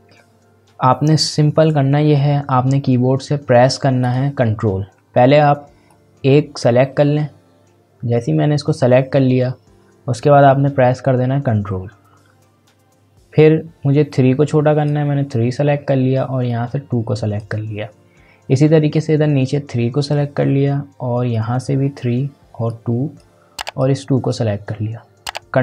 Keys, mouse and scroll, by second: 4.0-14.1 drag, 14.1-25.6 ctrl+drag.